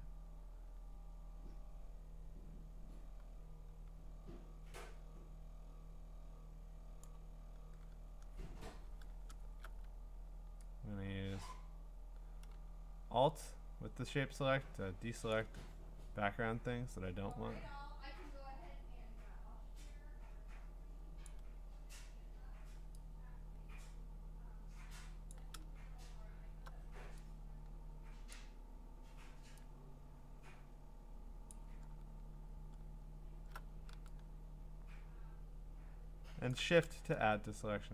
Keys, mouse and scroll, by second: 7.0 click, 9.4 scroll, 15.3 alt+click, 21.2 alt+click, 25.3 alt+click, 28.3 alt+click, 31.5 alt+click, 36.5-37.0 shift+click, 37.6 scroll, 37.7 scroll up 3.